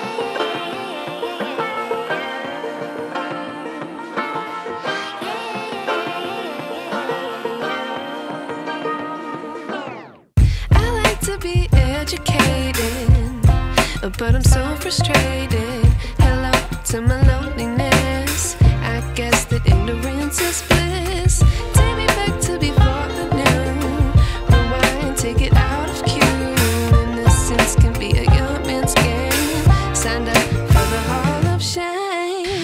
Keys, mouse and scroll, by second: 4.6 scroll down 1, 5.2 click, 8.0 click, 9.3-9.9 scroll down 1, 9.9 click, 10.9 scroll down 1, 11.9 click, 18.6 click.